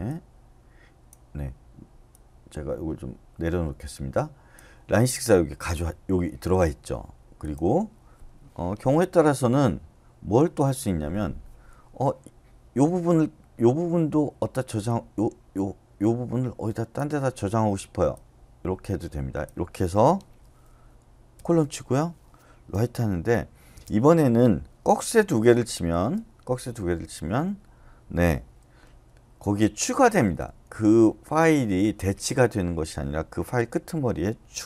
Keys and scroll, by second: 21.3 shift+;, 22.7 w, 23.7 space, 25.3 BackSpace, 25.7 >, 25.9 >, 29.8-30.5 typing, 34.3-34.6 typing.